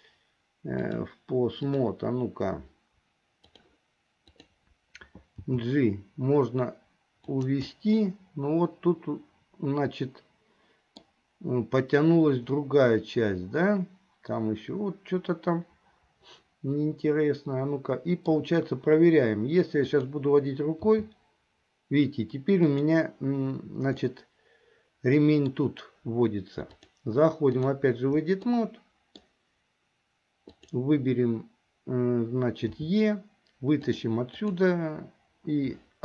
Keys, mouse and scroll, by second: 0.9-2.0 drag, 4.4 click, 5.6 g, 7.8-11.2 middle drag, 12.6-13.1 scroll up 1, 13.1-18.5 middle drag, 19.9 click, 21.1 g, 24.1-25.8 middle drag, 26.7-27.9 drag, 28.6 middle click, 32.8 e, 34.5 click.